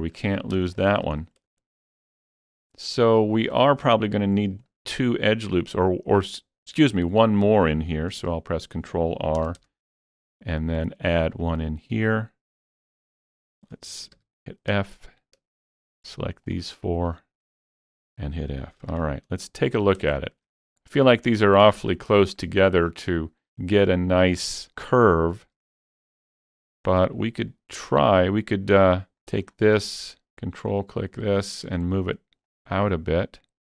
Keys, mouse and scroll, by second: 0.4 scroll up 3, 0.8 shift+middle click, 1.1-1.5 scroll up 2, 1.5-3.1 shift+middle drag, 2.4 scroll up 1, 3.6-7.5 shift+middle drag, 7.7-9.4 shift+middle drag, 8.1 ctrl+r, 9.4 Return, 9.6 Return, 10.5-11.4 scroll up 1, 11.4 click, 12.1 shift+click, 12.6 shift+click, 13.2 shift+click, 14.2 f, 15.0 shift+click, 16.5 shift+click, 17.1 shift+click, 18.0 f, 18.8 alt+a, 19.0-19.4 scroll down 4, 19.4 middle click, 19.8 scroll down 3, 20.2 shift+middle click, 20.8 shift+middle click, 22.4 middle click, 22.9-23.5 scroll up 2, 23.5-28.9 middle drag, 24.8-25.4 scroll up 3, 27.2 click, 28.8-29.5 scroll up 2, 28.9 middle click, 29.2 click, 29.5-29.8 scroll down 3, 29.8-33.6 middle drag, 30.7 ctrl+click, 32.5-33.6 ctrl+drag.